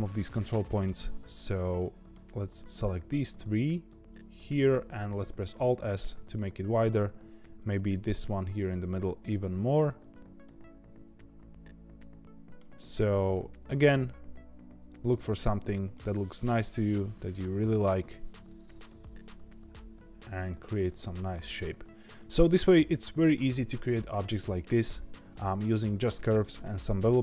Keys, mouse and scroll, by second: 1.3 click, 1.8 middle click, 2.4 click, 3.0 shift+click, 3.5 click, 4.0 shift+click, 4.4 shift+click, 4.9 middle click, 5.5 alt+s, 7.3 click, 8.0 middle click, 8.3 alt+s, 10.4-12.8 middle drag, 12.8 click, 13.3 alt+s, 15.3 middle click, 16.0-16.3 scroll down 3, 16.3-17.6 middle drag, 17.6-18.1 scroll up 4, 18.1 click, 18.4 middle click, 18.9 alt+s, 21.0 middle click, 21.9-22.2 scroll down 2, 22.2-25.3 middle drag.